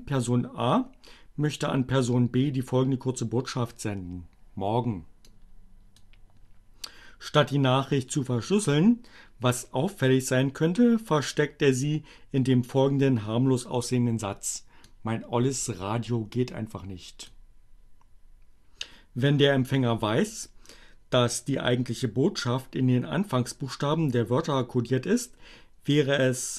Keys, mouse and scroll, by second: 5.3 click, 14.9-17.2 drag.